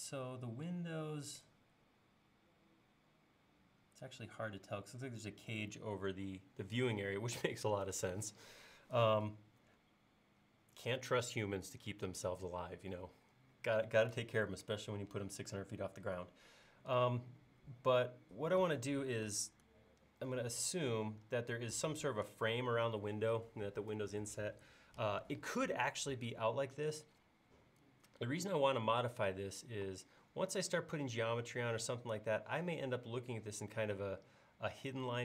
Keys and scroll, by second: 19.4 super+Tab.